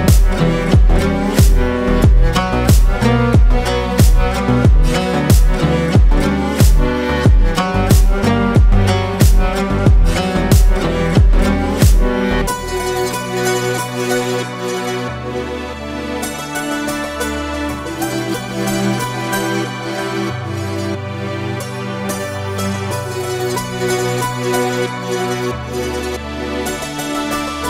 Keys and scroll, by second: 3.5 ctrl+space, 6.0 ctrl+space, 13.4-15.9 typing, 17.5-22.9 typing.